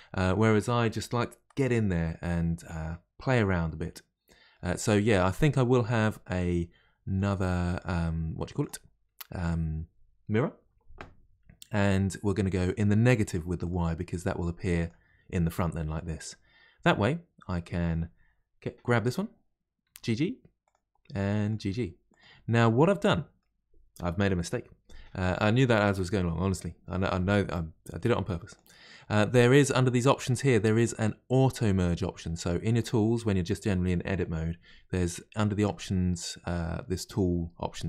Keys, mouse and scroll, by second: 2.3 middle click, 3.2-3.6 scroll up 1, 3.6-6.7 middle drag, 7.1 click, 8.6 click, 12.5-14.9 drag, 15.7-16.9 middle drag, 16.9-17.8 scroll up 1, 17.8 click, 19.9 g, 21.4 click, 21.5 g, 22.5-25.5 middle drag, 28.5 click, 30.4 click, 32.7 click.